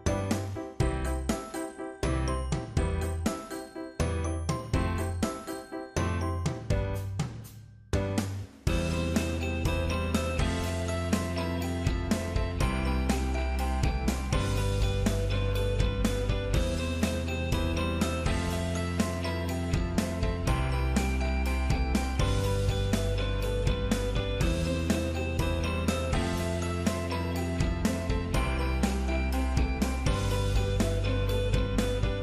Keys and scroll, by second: 17.4 shift+Down.